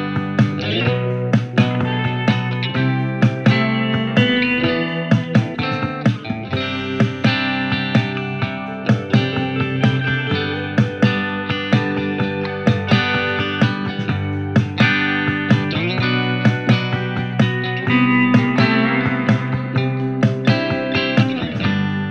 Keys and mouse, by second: 12.3 ctrl+z.